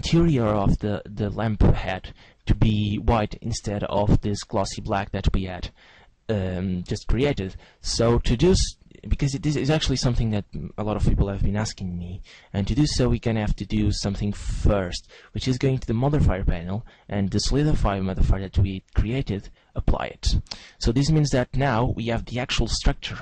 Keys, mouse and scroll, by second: 8.5 middle click, 9.4-11.4 scroll up 7, 11.4 Tab, 12.1 shift+middle click, 13.6 Tab, 15.8 click, 19.2 click, 20.6 Tab.